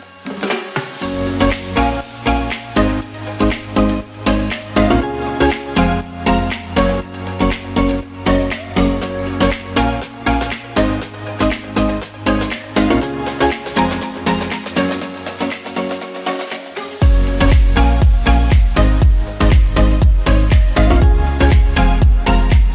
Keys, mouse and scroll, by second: 6.0 ctrl+z, 9.6 shift+a, 12.6 s, 13.9-18.2 typing, 19.7 s, 21.0 g, 21.3 z.